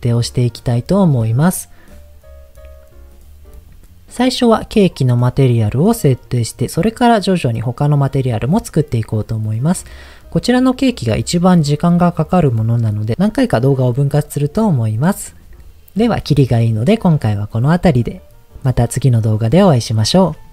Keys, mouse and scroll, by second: 4.7 click, 10.1 scroll up 2.